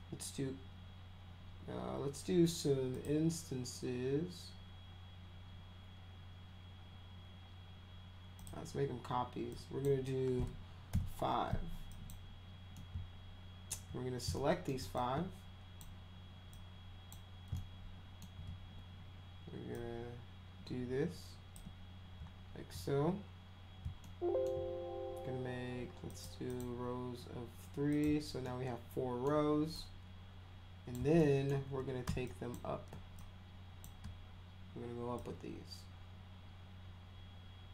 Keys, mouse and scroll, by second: 2.9 click, 8.4 click, 9.5 click, 10.9 5, 11.9 click, 12.8 alt+middle click, 14.3 alt+middle click, 15.0 ctrl+click, 16.5 ctrl+click, 17.5 alt+middle click, 19.7-21.5 shift+drag, 24.0-24.4 alt+middle drag, 26.1 click, 26.5 click, 27.9 click, 28.4 alt+middle click, 29.7-30.9 drag, 31.2 alt+middle click, 32.3 shift+click, 33.1 click, 35.2-37.7 shift+drag.